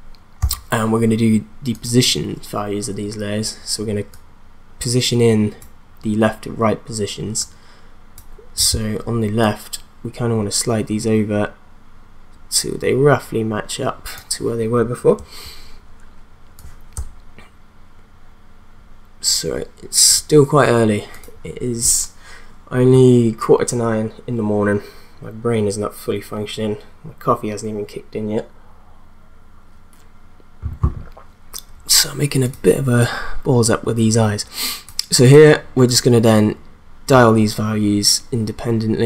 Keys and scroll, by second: 0.4 p.